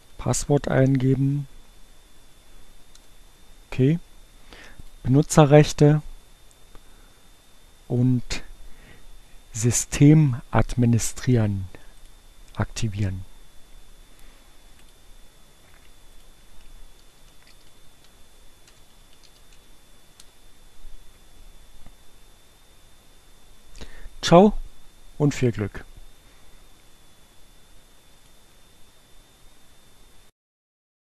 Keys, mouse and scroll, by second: 0.3 l, 2.7 Return, 15.7-17.9 drag, 17.9 w, 18.9 space, 28.1 click.